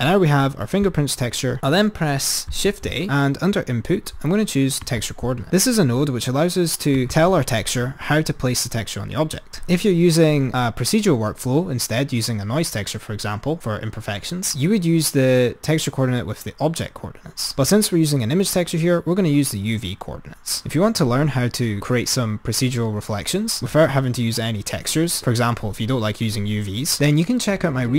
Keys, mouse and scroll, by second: 2.7 shift+a, 9.8 click.